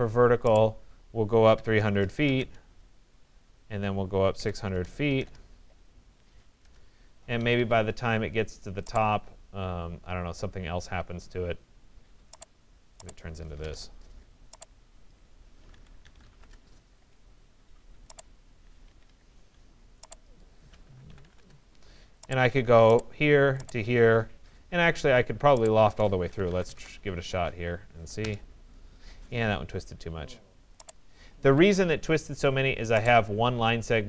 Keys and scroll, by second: 1.3-2.3 typing, 2.4 Return, 4.4 6, 4.6 0, 5.2 Return, 7.4 Escape, 13.3 Return, 18.9 Escape, 21.4 Return, 26.5 Return, 31.5 Escape.